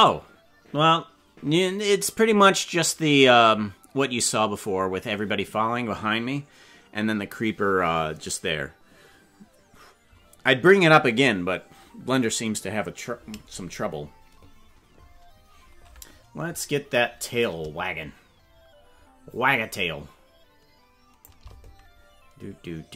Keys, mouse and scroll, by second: 17.4-21.3 drag.